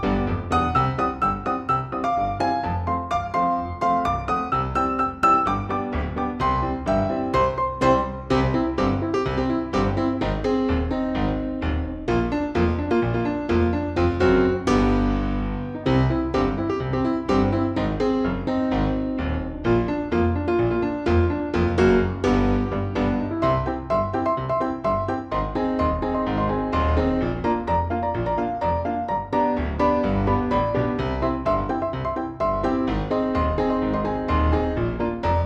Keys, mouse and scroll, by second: 0.3 shift+click, 2.7 KP_Add, 3.3 click, 4.7 shift+click, 6.2 shift+click, 7.6 F2, 7.9-9.1 drag, 9.2 F6, 10.1 shift+click, 11.2 shift+click, 12.9 shift+click, 14.1 shift+click, 15.6 shift+click, 17.0-18.1 shift+drag, 18.6 shift+F2, 18.7 click, 20.1 shift+j, 22.0 click, 23.2 click, 24.1 ctrl+z, 24.3 ctrl+click, 24.8-26.1 ctrl+drag, 26.4 F6, 27.3-28.5 shift+drag, 29.0 shift+click, 29.8 shift+click, 30.6 shift+click, 31.1 shift+click, 31.9 shift+click, 32.8 shift+click, 34.6-35.4 shift+drag.